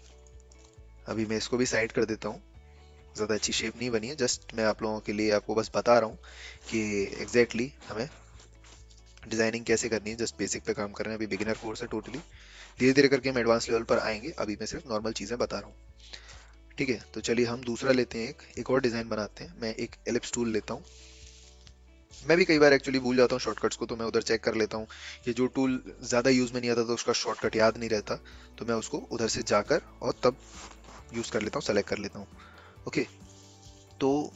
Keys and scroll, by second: 8.2 v, 8.4 ctrl+alt+0.